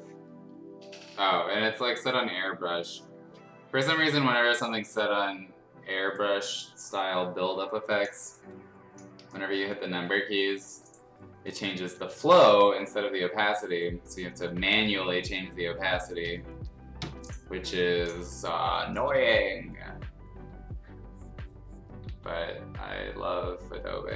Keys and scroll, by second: 22.0 ctrl+z.